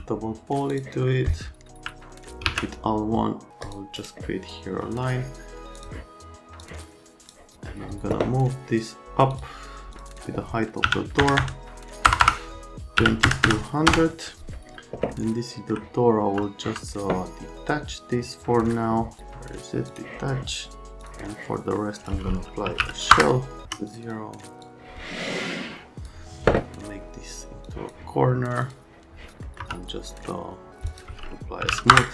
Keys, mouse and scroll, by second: 0.0-0.2 typing, 0.7 click, 1.1 right click, 2.5 alt+1, 3.6 click, 4.0 right click, 5.8 click, 6.6 click, 9.3 click, 9.9 click, 10.1 click, 10.8-13.5 typing, 13.9 KP_Enter, 15.1 alt+middle click, 16.6 F3, 19.9 middle click, 21.0 middle click, 22.0 click, 22.4-23.6 typing, 23.9 click, 24.0 click, 24.6 click, 27.7 middle click, 28.6 middle click, 29.4 right click, 30.3 alt+middle click, 31.3-32.1 typing.